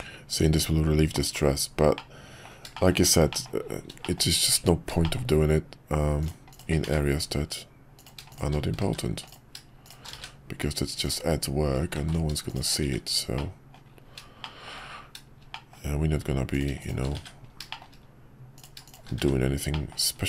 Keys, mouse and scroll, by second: 1.9-2.4 middle drag, 2.7 shift+middle click, 3.3 middle click, 4.0 shift+middle click, 4.5 Tab, 5.0 shift+middle click, 6.2 click, 6.9 1, 7.9 click, 8.3 shift+click, 8.9 shift+1, 9.3 click, 9.8 shift+click, 10.2 shift+1, 11.0 click, 12.0 ctrl+z, 12.5 shift+click, 12.9 shift+1, 13.3 middle click, 14.4 shift+middle click, 15.5 middle click, 16.8 shift+click, 17.7 middle click, 18.5 click, 18.8 click, 19.2 1, 19.7 middle click.